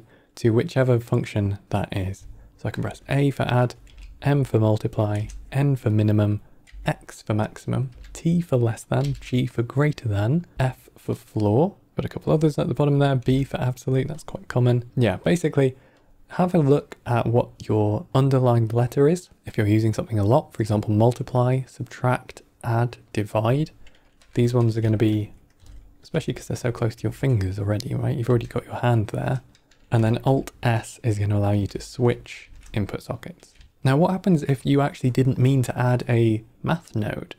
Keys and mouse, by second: 2.6 click, 3.5-4.0 drag, 4.9 click, 5.8 click, 7.3 click, 8.7 click, 9.7 click, 11.0 click, 14.1 click, 15.1 click, 15.9-23.6 drag, 24.1 click, 25.1 click, 25.9 click, 26.5 click, 27.6 click, 28.8 click, 30.0 alt+s, 31.6 alt+s, 32.3 alt+s, 33.5 alt+s, 33.8 middle click, 34.5-35.9 drag.